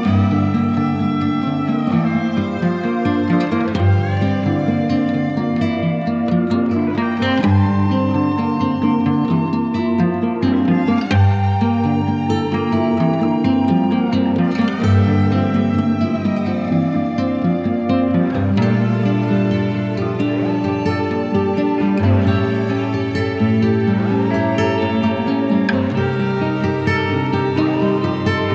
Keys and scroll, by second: 0.1 ctrl+alt+x, 0.7 z, 2.0 b, 3.7 ], 4.3 x, 5.3 space, 6.0 [, 6.7 [, 8.9 z, 18.3 v, 23.0 z, 23.7 space.